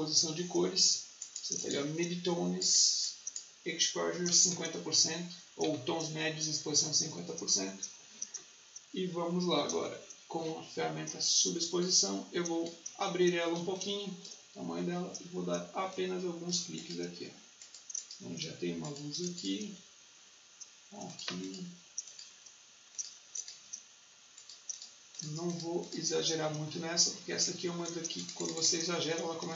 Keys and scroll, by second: 3.8-4.7 typing, 13.5 space, 29.4 ctrl+alt+z.